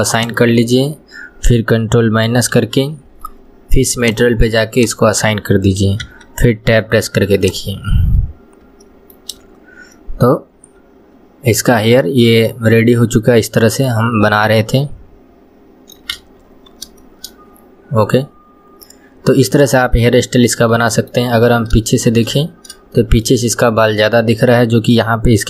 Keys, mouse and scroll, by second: 0.2-2.5 drag, 2.5 ctrl+KP_Subtract, 4.1 click, 4.8 click, 5.6 scroll down 1, 6.2 Tab, 6.5 scroll down 1, 7.5 click, 8.9-13.0 shift+middle drag, 14.1 scroll up 1, 14.6-16.2 middle drag, 16.2 KP_1, 16.6 scroll down 2, 17.1-21.4 shift+middle drag, 21.4-21.9 scroll up 2, 21.9-22.5 shift+middle drag, 22.5-23.0 scroll down 1, 23.0-24.1 shift+middle drag, 24.1-25.4 scroll down 1.